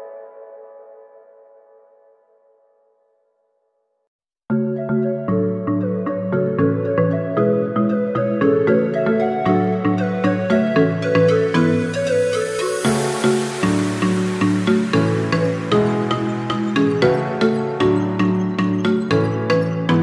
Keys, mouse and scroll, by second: 2.1 click, 3.5-4.6 drag, 4.6 scroll down 4, 5.5 click, 6.3 scroll up 2, 8.0 click, 11.8-12.1 scroll down 5, 13.1-15.2 drag, 17.3-18.8 shift+middle drag, 18.8 click.